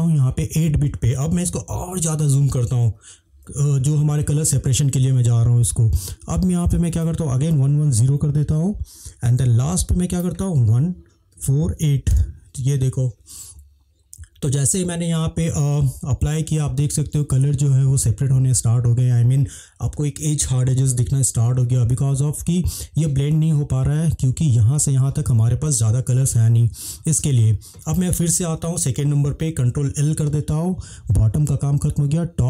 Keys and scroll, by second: 3.5 ctrl+l, 7.6-8.1 typing, 10.7-12.1 typing, 30.0 ctrl+l.